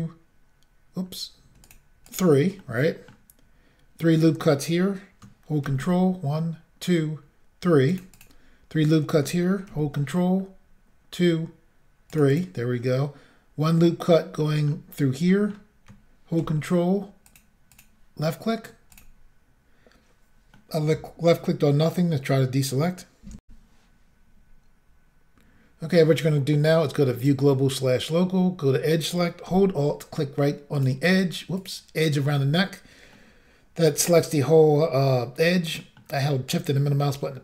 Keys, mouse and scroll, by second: 0.2-0.5 scroll up 2, 1.0 scroll down 1, 1.7 click, 2.1 click, 2.2 double click, 2.6 middle click, 5.7 ctrl+r, 6.5-6.9 scroll up 1, 7.7 scroll up 1, 7.9 click, 8.2 click, 8.4 double click, 9.7 ctrl+r, 10.4-10.9 scroll up 1, 11.6 scroll up 1, 12.1 click, 12.3 click, 12.4 double click, 14.4 middle click, 15.3 middle click, 16.4 ctrl+r, 17.3 click, 17.8 click, 19.0 double click, 20.6 middle click, 23.5 Insert, 27.2 click, 30.8 alt+click, 31.6 alt+click, 33.8 shift+middle click, 35.8 middle click.